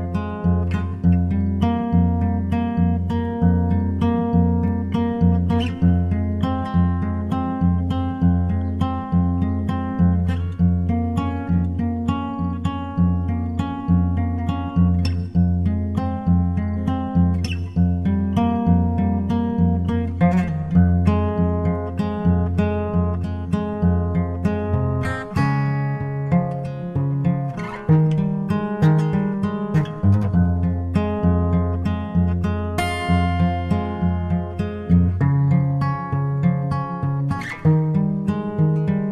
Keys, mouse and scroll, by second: 0.2 scroll down 1, 0.4 middle click, 1.0-9.2 drag, 10.0-11.8 drag, 11.9-13.6 drag, 15.3-17.1 drag, 19.6 Tab, 23.2-25.1 drag, 26.4-29.6 drag, 37.8-39.1 drag.